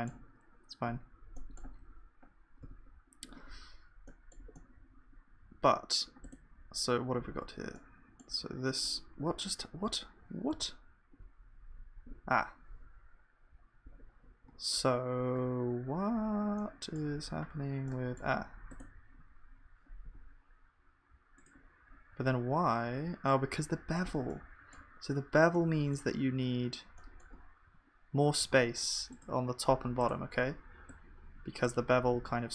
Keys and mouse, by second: 0.0-32.5 drag.